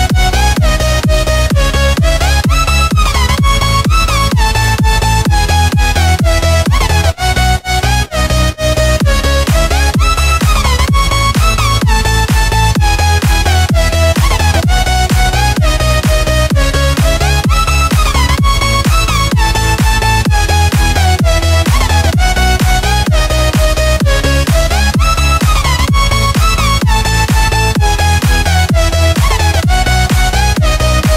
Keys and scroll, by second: 1.2 v, 1.9 Tab, 2.6 space, 3.1 alt+super+space, 3.1 alt+super+space, 3.2 alt+super+space, 3.3 alt+super+space, 3.4 alt+super+space, 3.5 alt+super+space, 4.1-5.0 alt+super+space, 5.0 super+space, 5.1 super+space, 5.2 super+space, 5.4 super+space, 5.5 super+space, 5.6 super+space, 5.8 super+space, 6.3 super+space, 8.4 Left, 10.6 shift+super+], 13.2 Left, 15.2 shift+super+], 15.8 Left, 17.9 shift+super+], 19.4 Right, 19.6 Right, 20.2 Right, 21.5 space, 22.0 space, 23.0 space, 23.5 space, 26.9 space, 27.4 super+space, 27.5 super+space, 27.6 super+space, 27.7 super+space, 27.8 super+space, 27.9 super+space.